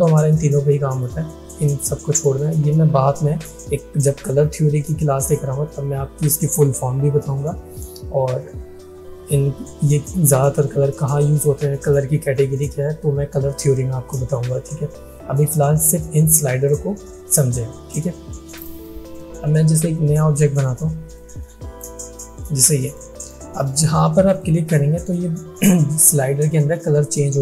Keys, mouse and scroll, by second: 16.7-17.9 drag.